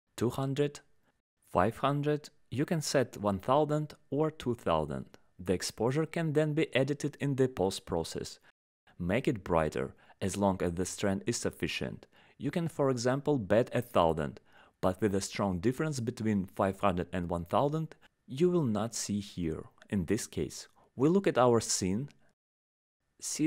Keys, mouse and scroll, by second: 6.8 click, 7.0 click, 9.7 click, 15.7 right click, 15.8 click.